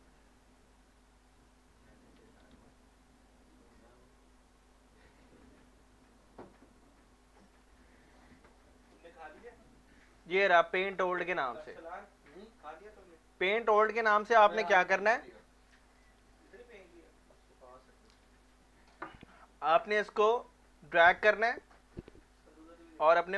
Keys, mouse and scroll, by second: 2.2-3.0 typing, 20.1-23.3 drag.